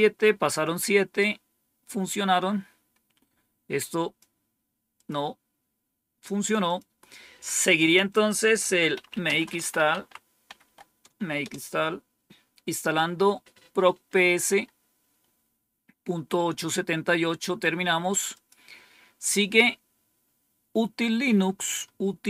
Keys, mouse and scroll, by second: 2.2-2.9 scroll down 1, 3.7 click, 4.8 click, 6.5 click, 8.2-10.5 typing, 11.3 Return, 18.2 click.